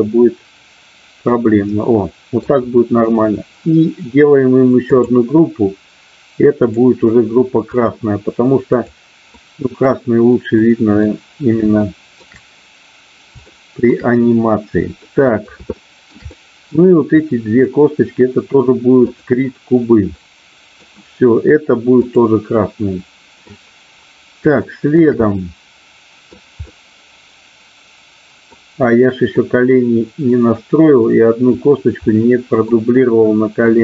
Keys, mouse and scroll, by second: 6.7-7.9 drag, 9.3 middle click, 10.6 middle click, 11.8 shift+middle click, 13.4 shift+middle click, 14.9 middle click, 15.7 shift+middle click, 16.3 middle click, 17.2 click, 20.3 middle click, 22.1 click, 22.6 middle click, 24.6 shift+middle click, 25.3 middle click, 26.7-28.4 middle drag, 29.3-31.1 middle drag, 32.1 middle click, 33.7-33.8 middle drag.